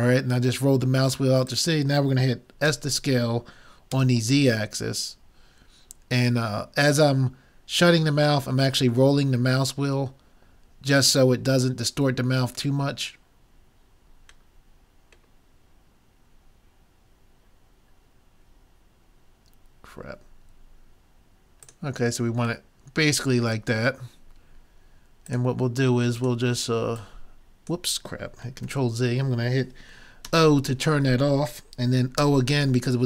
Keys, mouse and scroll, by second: 1.1 click, 2.1 click, 2.7 s, 3.1-4.5 drag, 21.7-23.4 drag, 22.7-24.5 middle drag, 23.1 right click, 25.3-28.7 drag, 28.7 ctrl+z, 30.3 o, 32.2 o.